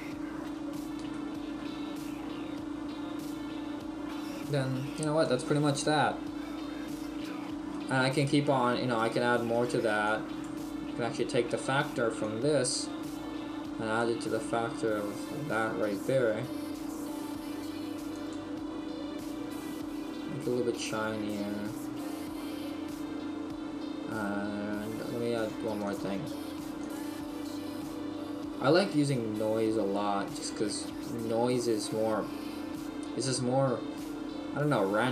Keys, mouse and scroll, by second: 1.0 shift+middle click.